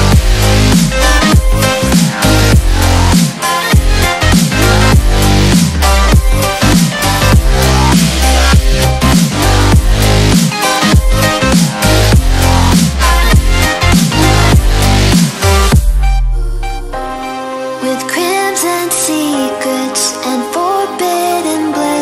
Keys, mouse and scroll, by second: 1.0 shift+Down, 1.9 click, 2.2 space, 2.4 click, 2.6-2.9 space, 3.8 ctrl+-, 4.0 space, 4.2-4.9 drag, 6.8-7.3 shift+click, 8.1 ctrl+=, 8.5 space, 8.6 click, 8.9 space, 9.1 click, 10.7 space, 11.8-13.8 drag, 15.8-16.8 shift+click, 16.9 ctrl+z, 18.0-22.0 drag.